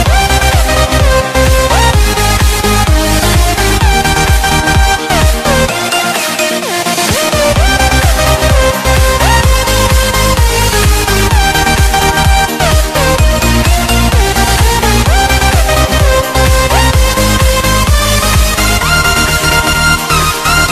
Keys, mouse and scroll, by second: 1.3 c, 1.4 Tab, 1.8 click, 3.6 ctrl+a, 4.2 click, 5.6 alt+Tab, 6.5 click, 8.3 ctrl+c, 8.6 alt+Tab, 8.9 click, 10.5 click, 10.8 Right, 11.6 Left, 11.8 ctrl+0, 12.4 click, 14.2 ctrl+shift+s, 15.3 click.